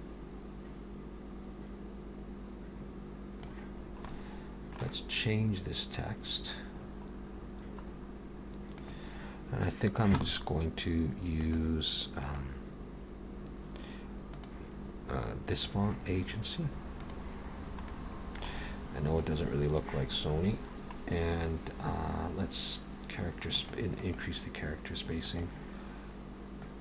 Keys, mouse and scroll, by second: 3.8-4.2 scroll down 3, 4.1 middle click, 6.2-6.8 scroll up 1, 6.8 scroll up 2, 6.8-8.8 scroll down 7, 8.8 click, 8.8 scroll down 2, 17.2 click, 17.9 middle click, 19.2 click, 20.4-20.9 scroll down 1, 20.9-21.5 scroll down 4, 21.5-22.0 scroll down 3, 23.6 click, 24.0 click, 25.3 click, 26.6 click.